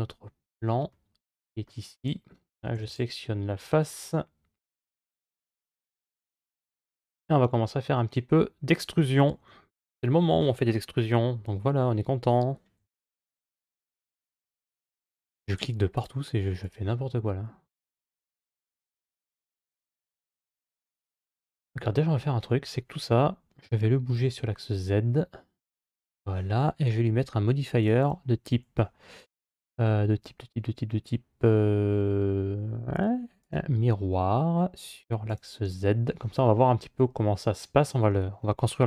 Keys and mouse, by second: 0.7 middle click, 2.6 3, 4.7 Tab, 5.2 right click, 5.9 3, 6.0-9.0 right drag, 12.6 KP_5, 13.8 KP_5, 15.8 click, 16.4 click, 17.1 middle click, 23.4 g, 27.6 click, 33.3 click, 35.1 click.